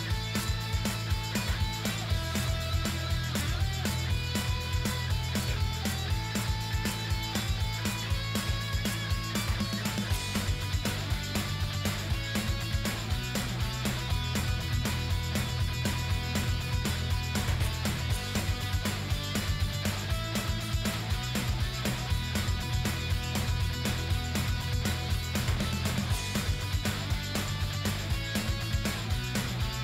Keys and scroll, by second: 21.0-25.5 typing.